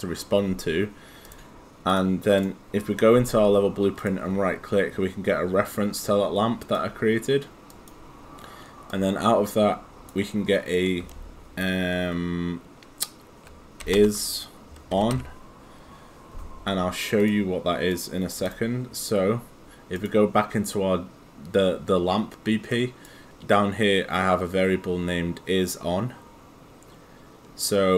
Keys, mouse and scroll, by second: 1.3 click, 4.0 right click, 6.6 click, 14.0-15.6 typing, 17.2 click, 20.0 click, 22.7 right click.